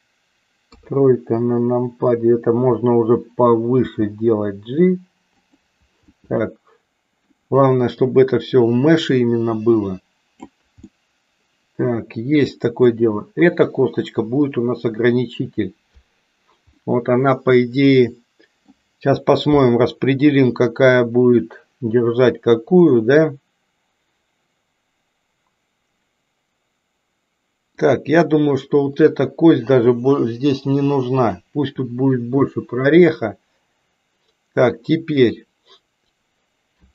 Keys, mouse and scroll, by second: 0.7 KP_3, 3.7 g, 6.2-7.3 middle drag, 8.1-10.4 drag, 10.9-12.8 middle drag, 16.8-18.8 middle drag, 27.8 click, 30.6 Delete, 35.0 click.